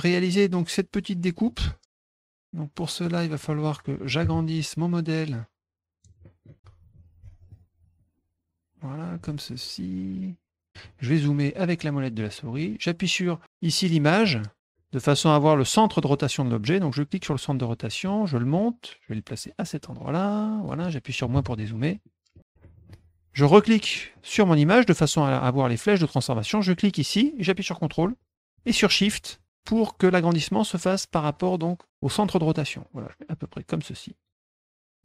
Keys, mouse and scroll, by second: 2.1 middle click, 2.4 click, 3.0 middle click, 3.4 middle click, 4.9-6.0 drag, 6.2 middle click, 7.5-9.1 ctrl+shift+drag, 9.5 click, 11.4 middle click, 11.4-11.8 scroll up 3, 11.6 middle click, 11.8 middle click, 12.2 middle click, 14.2 click, 17.0-17.9 drag, 18.1 middle click, 19.0-20.6 drag, 22.0 middle click, 22.6 middle click, 23.5 click, 23.9 middle click, 26.8-34.2 drag, 34.5 middle click, 34.6 middle click, 34.7 middle click.